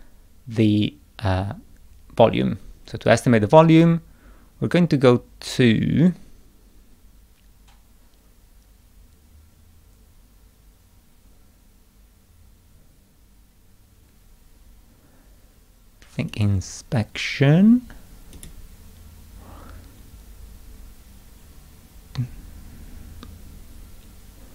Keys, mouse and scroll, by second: 3.7 click, 16.3 click, 18.4 click.